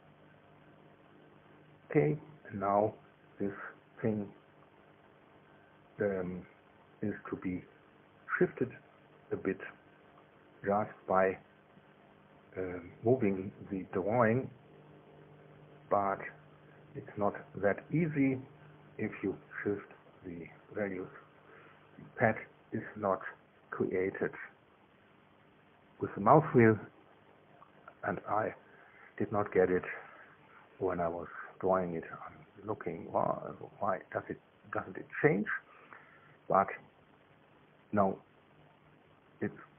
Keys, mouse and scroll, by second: 0.7 BackSpace, 1.2 KP_3, 1.8 KP_Enter, 4.5-7.0 drag, 15.8 click, 16.6 click, 24.0 scroll up 1, 24.7-25.5 scroll down 1, 25.5 click, 26.8 scroll down 1, 28.8 scroll down 1, 29.2 scroll up 1, 30.0-31.1 scroll down 1, 31.1 right click, 32.2 click, 32.6-35.1 middle drag, 34.7 KP_1, 36.0 KP_3.